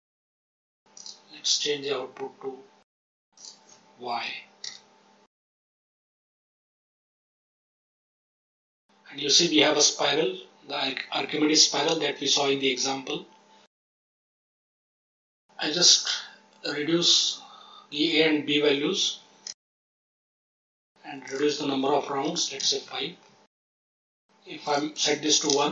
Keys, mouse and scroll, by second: 0.6 Tab, 0.9 click, 3.3-4.6 drag, 5.5 Tab, 6.3 click, 7.3 middle click, 8.0-8.4 drag, 8.6-10.1 scroll down 7, 14.6-19.4 drag, 20.0 click, 21.2-22.6 drag, 23.5-24.5 scroll up 5, 24.6 click, 24.6-25.5 scroll up 2.